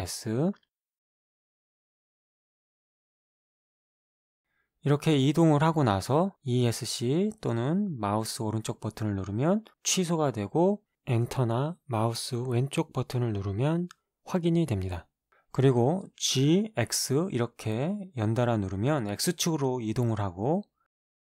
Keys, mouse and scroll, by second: 0.0 s, 3.2 right click, 3.9 right click, 4.0 g, 5.7 Escape, 6.5 g, 7.2-8.3 right drag, 9.3 g, 11.0 Return, 12.0 g, 12.4 click, 15.4 g, 16.6 x, 19.3 right click, 20.0 g, 20.5 x.